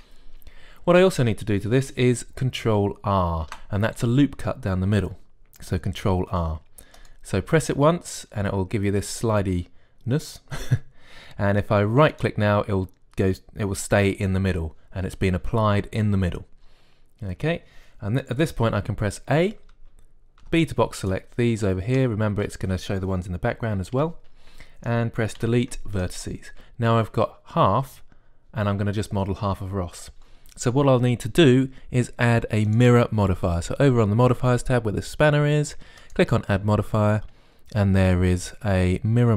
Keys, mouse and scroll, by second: 0.5 KP_1, 4.3 ctrl+r, 20.2 a, 21.2 b, 22.9-24.6 middle drag, 24.8 KP_1, 26.2 Delete, 33.5-35.3 drag, 36.8-38.8 drag.